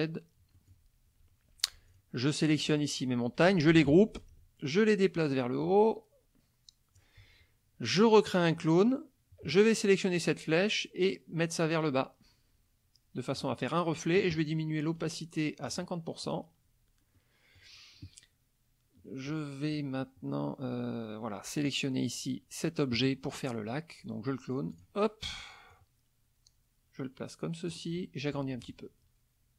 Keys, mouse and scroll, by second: 0.5 middle click, 1.9 shift+click, 2.4 shift+click, 3.7 ctrl+g, 4.2-7.2 ctrl+drag, 8.4 click, 10.2-13.6 drag, 15.0 click, 15.7 click, 16.2 click, 17.2 middle click, 19.3 middle click, 21.6 click, 24.7 click, 25.7 click, 28.7 ctrl+shift+click.